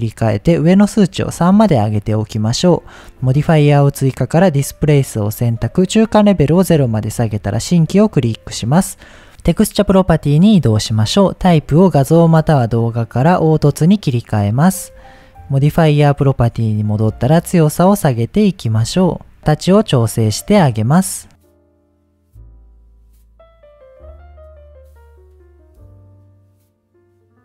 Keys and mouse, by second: 0.9 click, 4.5-6.3 drag, 9.5 click, 11.3-13.7 drag, 16.9-18.7 drag, 19.0 shift+click, 20.6 click, 21.6-23.2 shift+drag, 23.9-25.4 shift+drag, 25.7 middle click, 26.5 middle click, 27.2 click.